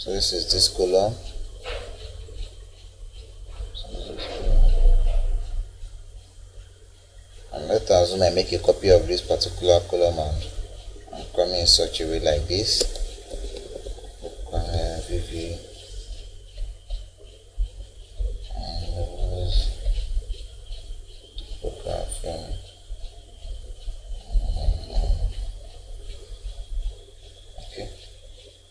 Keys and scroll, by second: 13.3 Escape, 14.5 v.